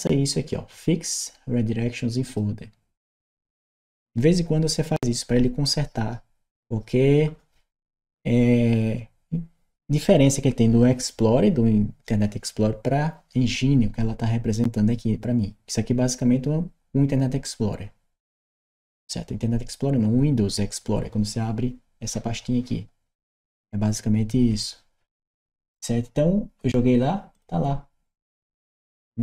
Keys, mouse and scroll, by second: 2.1 click, 27.2 click.